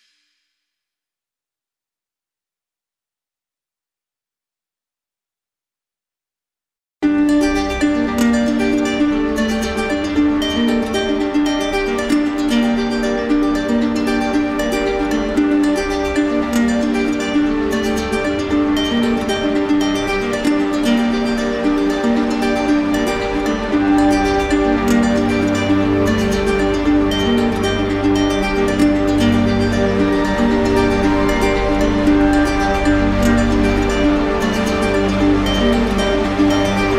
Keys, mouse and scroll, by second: 0.1 right click, 1.4 click, 2.3 right click, 3.6 click, 4.6 click, 5.6 click, 6.3 right click, 7.7 click, 8.3 alt+click, 9.1 right click, 9.8 click, 10.2 click, 10.6 click, 11.3 right click, 12.2 click, 12.8 right click, 13.5 alt+right click, 14.4 click, 15.0 click, 15.6 click, 16.2 alt+right click, 17.1 click, 18.6 click, 19.5 alt+right click, 20.0 right click, 20.8 right click, 21.3 click, 22.0 right click, 22.3 ctrl+z, 23.2 right click, 24.0 click, 24.8 right click, 26.2 click, 27.1 click, 28.1 click, 28.9 right click, 30.5 click, 31.3 right click, 32.4 click, 33.2 alt+right click, 35.0 right click.